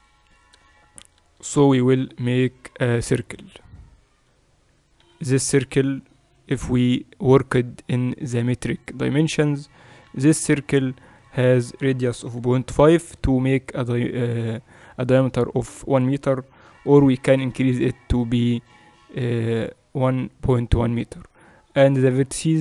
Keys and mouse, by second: 1.7 shift+a, 5.1 F6, 7.9-10.7 drag, 10.0 F6, 17.0 5.